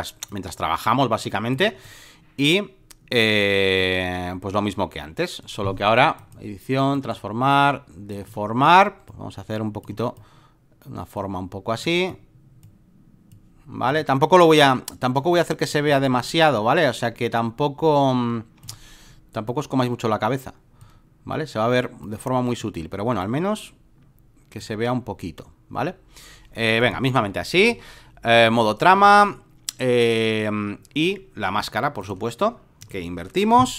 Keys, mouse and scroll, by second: 1.9-3.3 drag, 3.8-5.4 ctrl+drag, 6.2-26.6 drag, 26.9 Return, 27.6-30.6 drag, 32.0 click, 33.4 ctrl+i.